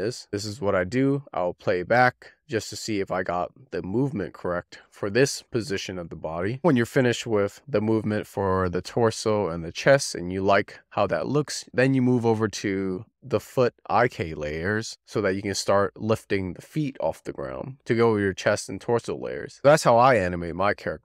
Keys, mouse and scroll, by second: 0.5 click, 4.6-8.0 drag, 11.5 click, 12.0-12.3 scroll down 2, 13.3 shift+drag, 15.6 click.